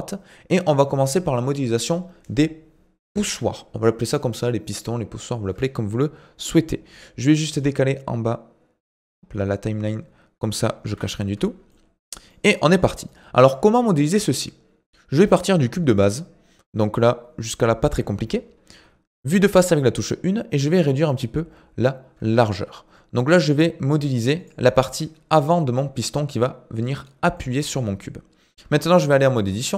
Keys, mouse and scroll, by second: 7.0-10.0 drag, 10.9 ctrl+s, 11.7-16.2 middle drag, 18.7 KP_1, 19.7-20.0 scroll up 1, 20.6 s, 25.8-27.2 middle drag, 27.2 scroll down 1, 27.4 middle click, 27.8-28.6 scroll up 1, 28.6 Tab, 29.1-29.7 middle drag.